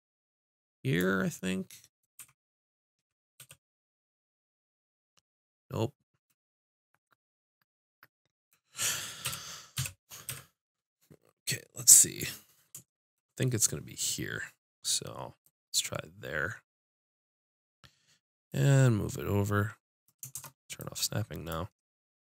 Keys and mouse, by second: 1.5-2.6 drag, 2.2 z, 3.4 KP_5, 9.2 KP_7, 9.8 KP_5, 10.3 z, 18.5-20.3 drag, 20.3 shift+Tab, 21.5 click.